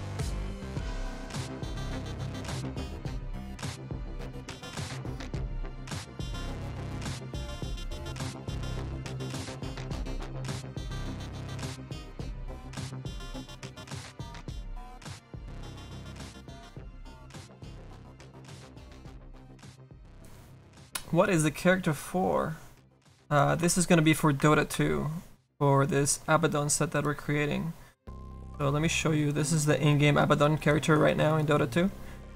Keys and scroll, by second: 3.6 alt+F11, 7.1 s.